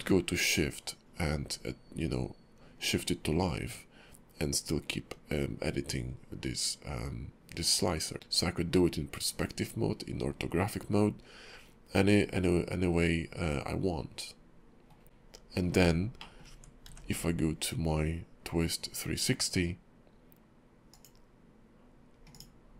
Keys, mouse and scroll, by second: 8.1 middle click, 15.3 KP_5, 15.6 scroll down 3, 16.2 middle click, 16.5 Tab, 16.9 q.